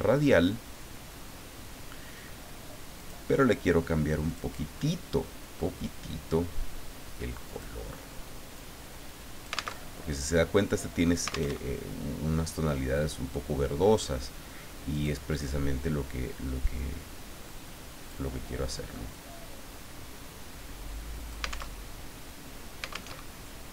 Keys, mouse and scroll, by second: 3.0 click, 4.3 click, 7.5 click, 8.5-9.7 drag, 9.7 alt+Tab, 11.5 alt+Tab, 14.9 click, 17.4 click, 19.1-21.7 drag, 21.7 alt+Tab, 23.1 alt+Tab.